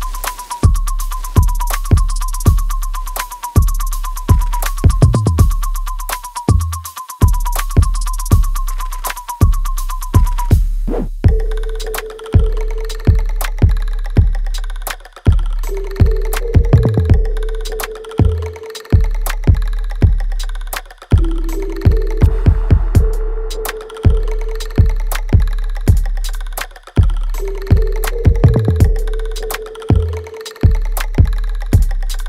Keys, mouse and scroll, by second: 0.8 click, 1.1 alt+click, 2.1 alt+middle click, 2.6 alt+right click, 3.4 ctrl+s, 3.9 alt+click, 4.9 right click, 5.4 alt+click, 6.0 right click, 7.0 click, 7.6 click, 9.2 alt+click, 9.5 alt+middle click, 9.9 alt+right click, 10.6 shift+click, 16.0 shift+click, 16.8 alt+right click, 17.2-18.6 alt+drag, 21.0 ctrl+b, 22.5 alt+middle click, 23.0 alt+right click, 24.6 click, 24.9 alt+right click, 25.3 alt+click, 25.7 alt+middle click, 26.1 right click, 26.5 alt+click, 27.1 right click, 27.8 click, 28.8-30.4 shift+right drag, 30.4 alt+click, 31.5 alt+right click, 32.0 alt+click.